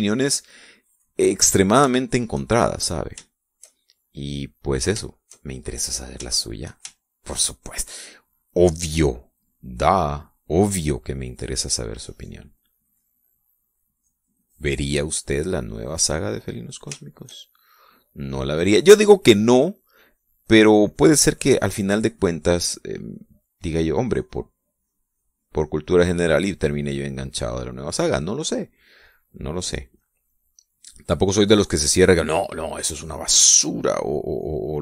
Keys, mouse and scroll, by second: 0.5-2.6 drag, 2.9 shift+middle click, 3.5-4.2 shift+middle drag, 4.3-5.6 shift+middle drag, 7.3 shift+middle click, 7.9 shift+middle click, 12.3-17.7 drag, 18.0 shift+middle click, 20.1-25.5 drag, 25.8-27.8 drag, 28.3 click, 29.1 middle click, 30.0 click, 30.6-32.6 middle drag, 32.8 click, 33.8-34.8 drag.